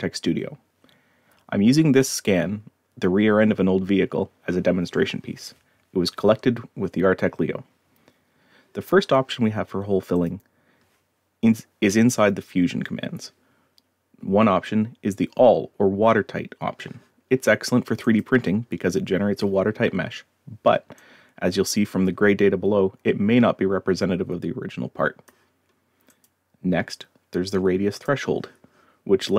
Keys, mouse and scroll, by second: 10.2 click, 18.1 click, 21.0-25.3 drag, 26.1 click, 28.0 click.